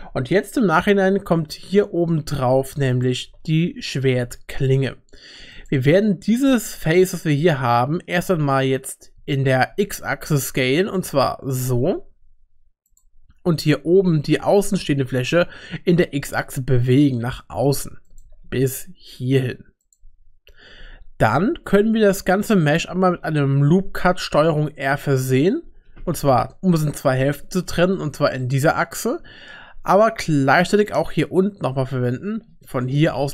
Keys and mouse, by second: 2.1 Tab, 2.6 3, 2.9 click, 3.2 g, 6.8 shift+middle click, 9.2 s, 14.0 3, 16.1 g, 18.2 g, 24.5 ctrl+r, 28.5 shift+click, 28.5 shift+middle click, 31.7 ctrl+r.